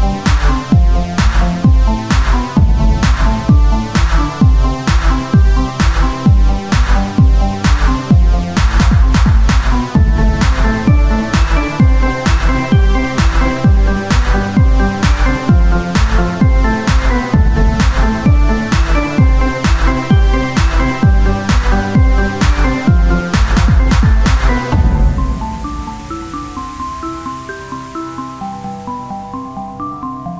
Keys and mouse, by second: 0.2 click, 0.6 right click, 1.2 e, 3.6 Tab, 4.8 Tab, 7.0 click, 7.8 Tab, 10.9 Tab, 11.9-15.8 drag, 12.6 z, 12.9 c, 15.8 x, 17.0-19.3 right drag, 18.1 e, 19.8 z, 20.1 Tab, 21.0 Tab, 22.4-23.5 drag, 22.4 right click, 23.5 Tab, 26.9 ctrl+r, 28.9 Tab.